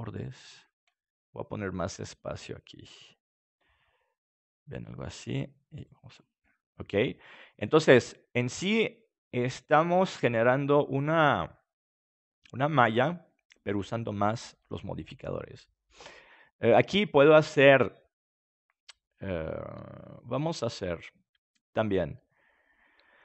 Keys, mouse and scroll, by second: 1.1 s, 2.3-4.2 drag, 3.4 Tab, 5.7-7.6 drag, 6.4-10.5 middle drag, 17.0-18.7 middle drag, 20.4-23.2 drag.